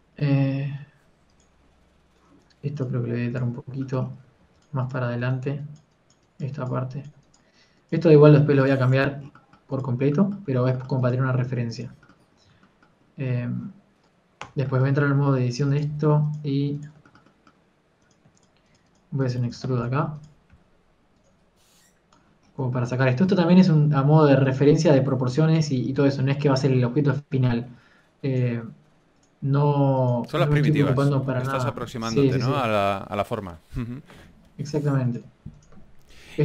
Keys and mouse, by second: 4.3 s, 7.7 g, 7.7 f, 10.2 a, 10.6 click, 10.6 right click, 11.8 click, 15.4 Tab, 16.6-20.7 drag, 17.1 z, 20.7 z, 21.0 e, 21.4 click, 21.4 s, 23.8-27.2 drag, 27.2 KP_1, 31.1 g, 31.1 r, 35.1 e.